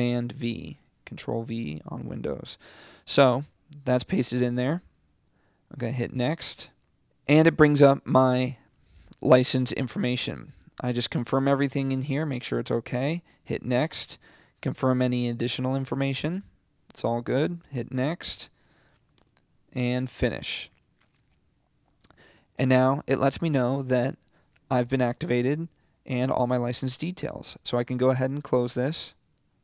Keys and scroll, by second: 0.6 super+v.